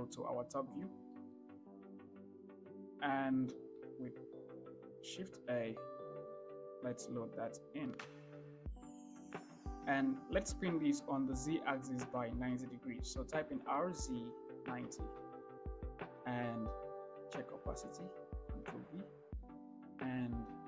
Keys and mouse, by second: 0.0 KP_7, 1.4 shift+middle click, 2.6 shift+middle drag, 5.5 shift+a, 9.4 shift+middle drag, 13.7 r, 14.3 z, 15.0 9, 15.2 0, 17.7 click, 19.0 ctrl+v.